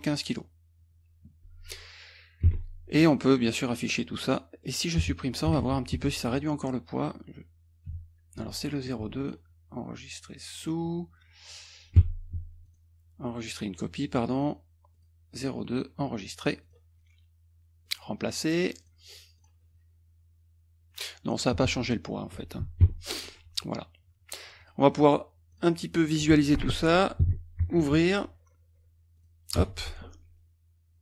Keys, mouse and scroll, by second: 2.5 Escape, 3.0 click, 3.4 click, 4.0 click, 4.6 click, 5.5 Delete, 9.2 click, 10.5 click, 12.0 Escape, 12.7 click, 13.5 click, 15.0 click, 16.6 click, 17.9 click, 18.9 click, 19.5 click, 21.0 click, 22.8 Escape, 23.3 click, 24.6 click, 25.6 click, 27.8 ctrl+o, 29.2 click, 29.6 Return.